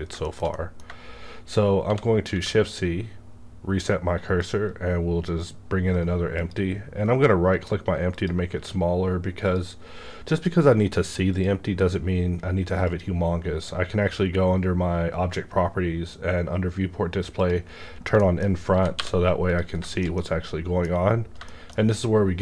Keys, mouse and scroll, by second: 0.2 shift+middle click, 0.5 shift+middle click, 1.8 shift+c, 2.3 shift+a, 4.4-6.3 drag, 4.7 shift+a, 5.9 right click, 8.1 click, 14.1-16.0 scroll down 1, 16.0 scroll down 1, 17.4 click, 18.1 middle click, 18.2 scroll down 1, 18.7 g, 19.0 y, 19.5 click, 19.8-22.4 shift+middle drag.